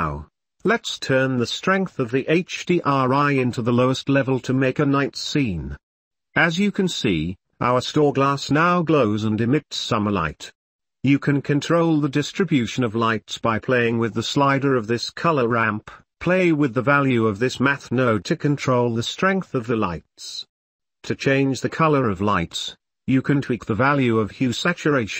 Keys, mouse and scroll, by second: 1.6-2.7 drag, 4.6 ctrl+s, 5.6-7.0 drag, 8.9-10.5 middle drag, 11.0 ctrl+s, 11.5-11.8 drag, 14.4-16.8 drag, 17.9 middle click, 19.1-22.0 drag, 22.5 middle click, 24.7-25.1 drag.